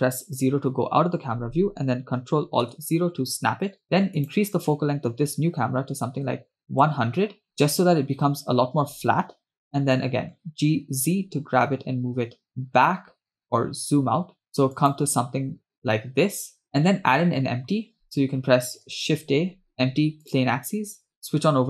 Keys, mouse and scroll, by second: 0.4 KP_0, 2.8 ctrl+alt+KP_0, 4.4-6.9 drag, 6.3 0, 10.9 g, 15.6-16.2 scroll down 2, 18.0 scroll up 4, 18.8 scroll down 2, 19.7 shift+a, 21.1 click.